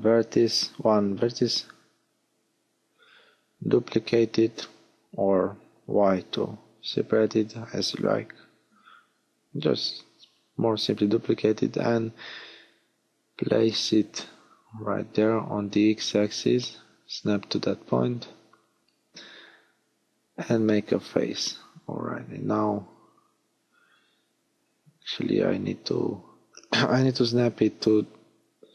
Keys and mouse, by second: 0.0-1.2 middle drag, 0.8 g, 3.3-6.0 middle drag, 3.3 l, 5.3 h, 10.9 shift+d, 12.5 g, 15.4 click, 18.0 f, 21.0 middle click, 23.7 g, 26.0 click, 28.0 click, 28.3 ctrl+z.